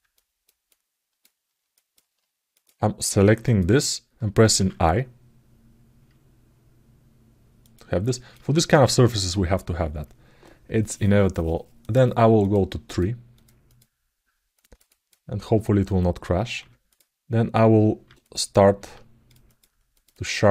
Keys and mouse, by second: 0.0 ctrl+alt+click, 0.4 ctrl+alt+click, 1.5 ctrl+alt+click, 1.5 ctrl+alt+middle click, 2.3 click, 3.2 click, 7.8 ctrl+alt+middle click.